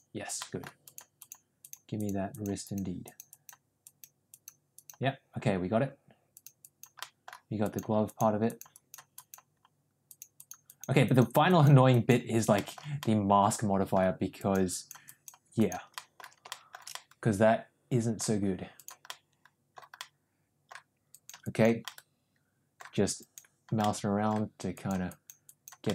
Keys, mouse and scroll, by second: 0.3 middle click, 0.7 click, 1.1 click, 1.5 click, 1.9 click, 2.2 click, 2.5 click, 3.0 click, 3.2 click, 3.7 click, 4.2 click, 4.7 click, 6.3 click, 6.5 click, 6.9 middle click, 7.5 click, 8.0 click, 8.4 click, 8.7 click, 9.1 click, 10.0 click, 10.3 click, 10.6 click, 11.0 click, 11.4 click, 11.8 click, 12.5 middle click, 12.9 middle click, 14.3 click, 14.6 click, 15.0 click, 15.5 click, 15.8 middle click, 16.4 shift+middle click, 16.8-18.1 middle drag, 18.6 click, 19.0 middle click, 19.9 middle click, 21.0 click, 21.4 click, 21.8 middle click, 23.1 click, 23.7 middle click, 24.6 click, 25.0 click, 25.4 click, 25.8 middle click.